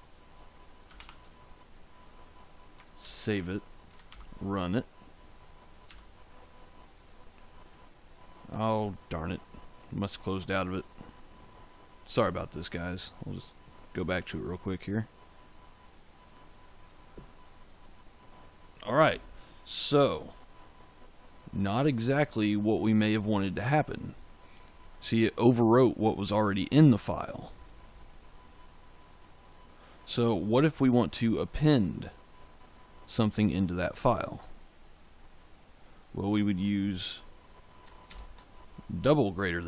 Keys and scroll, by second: 0.9 shift+5, 2.9 ctrl+s, 4.0 ctrl+shift+z, 5.8 f, 38.0 shift+..